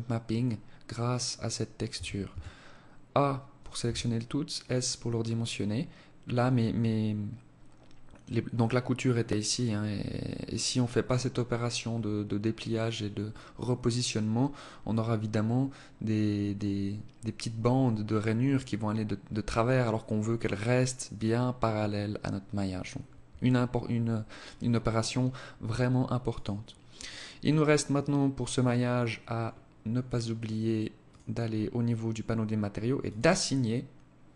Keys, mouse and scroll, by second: 26.1 click, 28.5-30.1 scroll up 9, 30.1 click, 32.1 click.